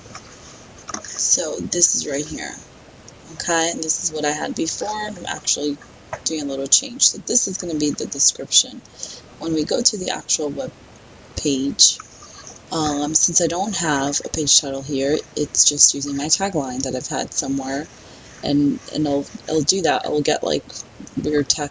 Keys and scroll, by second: 0.0-2.5 typing.